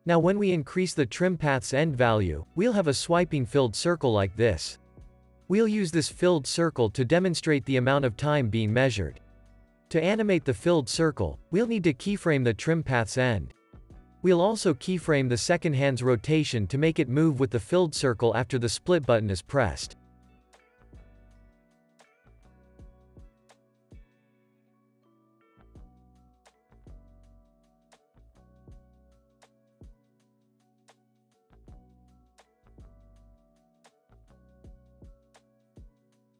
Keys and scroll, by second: 7.5 super+s, 11.3 u, 14.8 r.